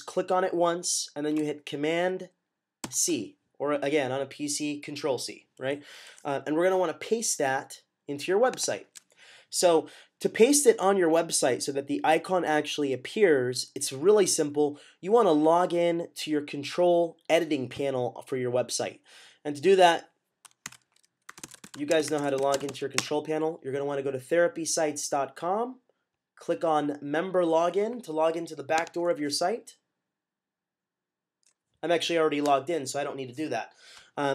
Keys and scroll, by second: 2.7 c, 20.5-23.0 typing.